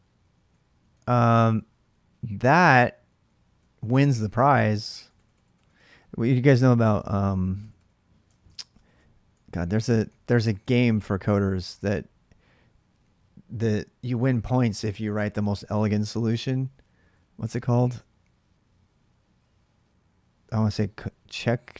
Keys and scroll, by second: 0.0-2.3 typing, 3.4-10.0 typing.